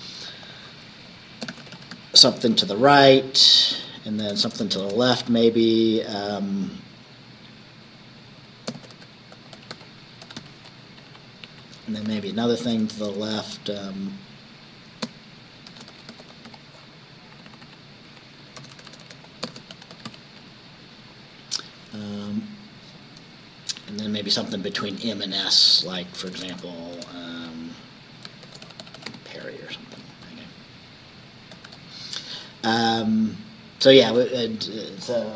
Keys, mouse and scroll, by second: 0.4 click, 1.3-2.8 typing, 2.9 Down, 3.8 Left, 4.3 BackSpace, 8.6-11.0 typing, 11.8 Left, 12.7 BackSpace, 15.5-17.0 typing, 17.4 Down, 18.1 Left, 18.7-20.6 typing, 23.8 Down, 25.4 Down, 26.2 BackSpace, 28.3-29.6 typing, 29.9 Up, 31.6 ctrl+s, 32.8 Down.